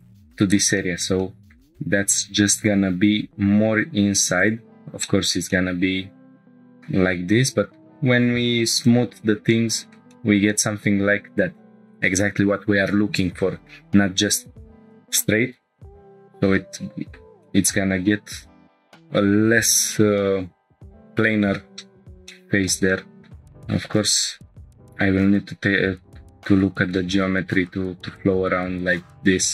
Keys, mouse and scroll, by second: 0.8 shift+middle click, 1.2 middle click, 1.7-2.4 scroll up 2, 2.4 g, 3.1 x, 4.4 click, 4.8 scroll down 1, 5.0 shift+middle click, 5.5-6.9 middle drag, 7.7 Tab, 8.8 click, 9.5-10.0 middle drag, 10.1 shift+middle drag, 10.5-11.9 middle drag, 12.5 scroll down 2, 13.7 scroll up 3, 14.4 scroll up 2, 15.9-17.2 shift+middle drag, 15.9 scroll down 2, 17.4-18.0 middle drag, 22.0 scroll down 1, 22.3-22.7 shift+middle drag, 22.9-23.2 middle drag, 23.4-24.3 scroll up 1, 24.3 Tab, 24.3 ctrl+r, 24.3 scroll down 2.